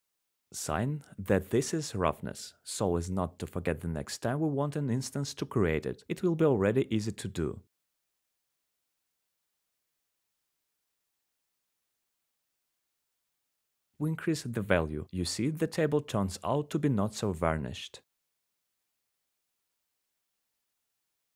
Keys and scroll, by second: 4.1-8.3 typing, 17.7 w, 18.2 w.